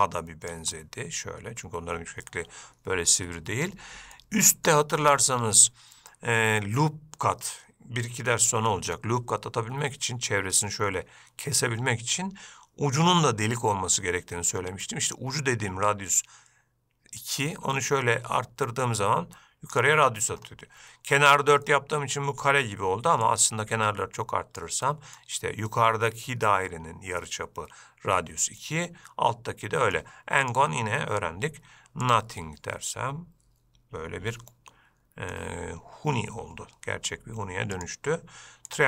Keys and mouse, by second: 1.0-1.9 middle drag, 4.4 middle click, 17.4-20.0 drag, 21.9 middle click, 23.6-24.9 drag, 25.1-25.4 middle drag, 28.9-30.2 middle drag, 30.7-32.4 drag, 32.7-35.6 middle drag, 38.2-38.8 drag.